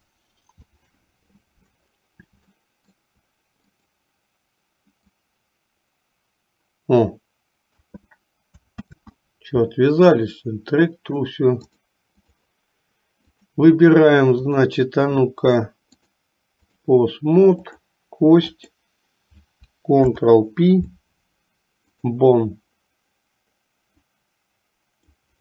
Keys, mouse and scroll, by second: 2.7 shift+middle click, 3.8 click, 5.3-8.0 drag, 8.9 ctrl+z, 11.7 click, 13.4 click, 14.6 shift+click, 16.0 click, 18.5 click, 20.1 ctrl+p, 24.1-25.4 drag.